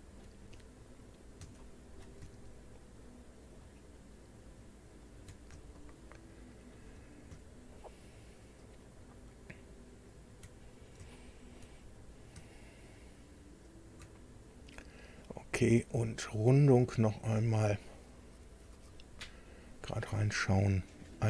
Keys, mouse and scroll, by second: 0.4-0.9 shift+scroll up 3, 1.5 shift+middle click, 3.4 ctrl+click, 4.9 ctrl+click, 5.7-6.8 shift+middle drag, 8.6 ctrl+click, 10.1 ctrl+click, 10.6-10.9 ctrl+scroll down 2, 11.1 shift+click, 11.8 shift+scroll up 3, 13.6 ctrl+click, 14.2-14.6 ctrl+scroll down 1, 17.2 click, 19.3-19.7 scroll up 2, 20.2 scroll up 2.